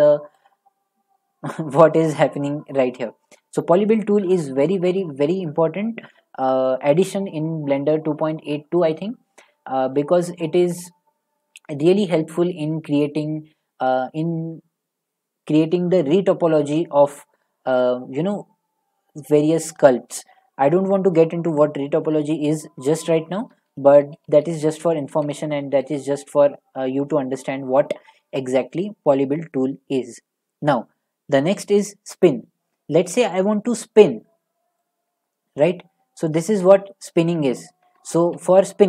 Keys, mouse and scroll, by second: 23.8 ctrl+click, 24.0 ctrl+z, 24.1 ctrl+z, 24.3 ctrl+z, 24.4 ctrl+z, 24.6 ctrl+z, 24.8 ctrl+z, 25.3 ctrl+z, 25.7 ctrl+z, 28.5 Tab, 30.5-30.9 middle drag, 32.2 click, 37.6 click, 38.2 ctrl+z.